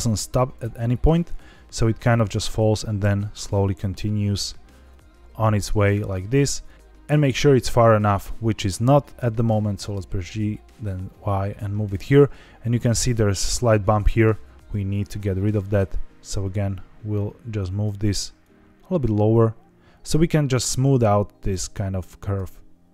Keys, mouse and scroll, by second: 1.2-3.7 drag, 3.8 scroll down 3, 4.8-6.1 drag, 6.6 click, 6.7 scroll down 1, 7.0-8.2 drag, 9.1 g, 9.4 y, 11.8 click, 12.5-14.8 scroll up 3, 14.8 click, 16.2 click, 18.3 click, 22.8 click.